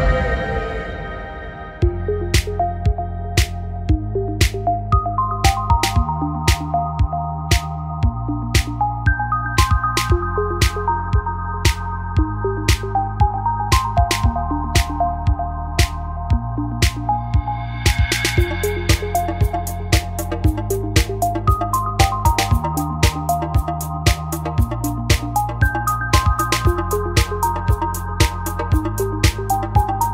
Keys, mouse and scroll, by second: 1.2 middle click, 1.7 right click, 4.0 f, 4.0 a, 5.3 f, 5.4 a, 7.7 f, 7.8 a, 8.8 f, 8.9 a, 9.9 x, 11.1-12.2 drag, 12.2 f, 12.2 click, 12.2 a, 13.6 click, 13.7 f, 13.7 a, 14.5 click, 15.1-16.1 right drag, 16.1 g, 20.2 a, 21.2 click, 21.6 click, 21.9 x, 23.1 x, 24.2 x.